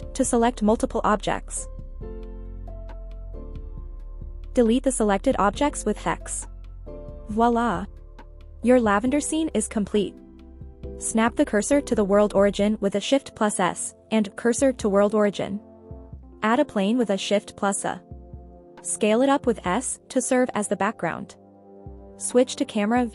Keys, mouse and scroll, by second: 0.2 shift+click, 1.2 shift+click, 3.1-3.5 ctrl+drag, 4.1 shift+click, 5.1 ctrl+shift+click, 5.9 x, 6.5-7.4 middle drag, 7.5 scroll down 1, 7.9 middle drag, 10.1 KP_1, 11.5-12.7 scroll down 3, 13.0 scroll down 1, 14.4 shift+s, 16.3 shift+a, 18.6 s, 19.3 click, 21.5 KP_0, 22.8-23.1 scroll down 1.